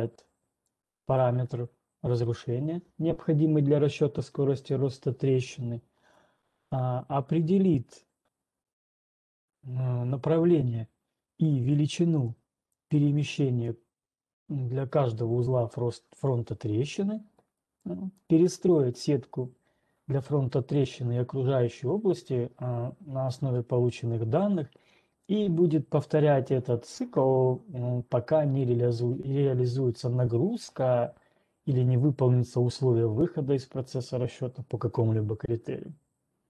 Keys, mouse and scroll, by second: 1.3-6.3 drag, 12.8 click, 26.8 click, 35.6-36.4 scroll.